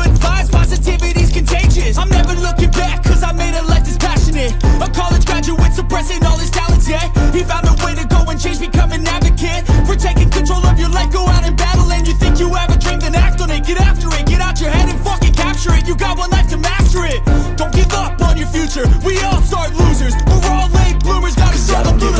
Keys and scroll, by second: 5.6 ctrl+a, 9.2 ctrl+a.